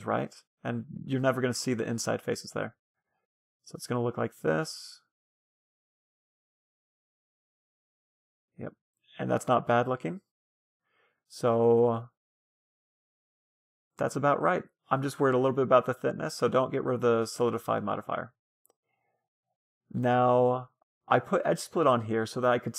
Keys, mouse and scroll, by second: 1.5-3.0 drag, 1.8-3.4 middle drag, 8.9-11.3 middle drag, 14.2-15.8 middle drag, 19.9-22.7 middle drag.